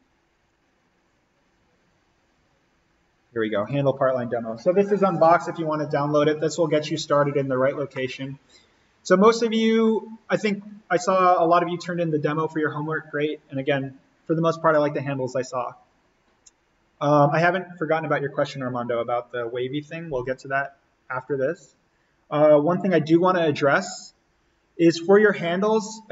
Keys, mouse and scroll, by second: 3.5 click, 7.9-9.4 middle drag, 9.4-9.9 scroll up 1, 9.9 middle click, 10.2 scroll, 10.5 scroll up 1, 25.1 scroll down 1.